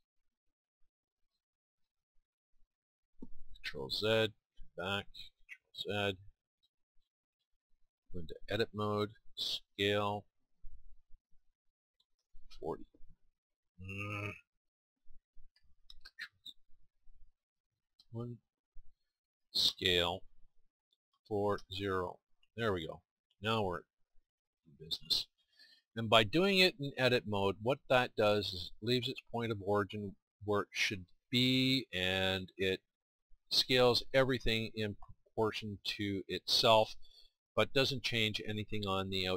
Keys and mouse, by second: 4.1 ctrl+z, 5.3 ctrl+z, 9.6 Tab, 12.2 KP_4, 12.4 KP_0, 17.9 KP_1, 19.7 s, 23.1-24.6 drag, 24.6 middle click, 25.9-27.1 drag, 27.1-38.5 middle drag.